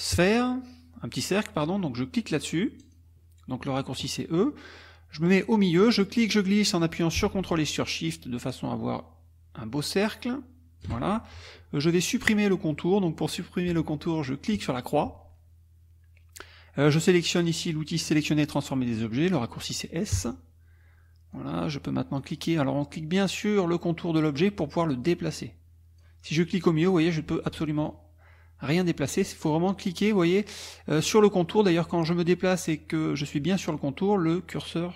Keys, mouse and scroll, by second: 2.8 click, 5.8-11.0 drag, 14.6 click, 20.2 s, 21.3 click, 24.8-26.2 drag, 26.3-28.1 drag.